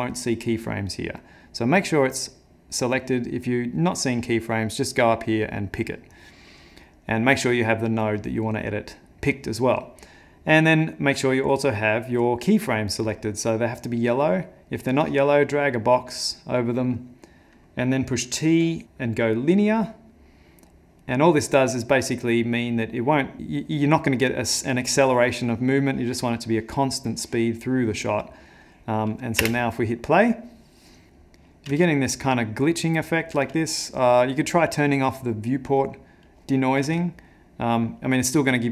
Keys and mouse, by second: 2.2 click, 7.4 click, 8.5 click, 12.8 click, 14.3 click, 14.8 click, 19.9 t, 21.0 click, 22.2 click, 29.5 space, 31.1 shift+Left, 31.1 space, 31.2 click, 31.8 space, 33.4 space, 35.8 click, 36.8 space.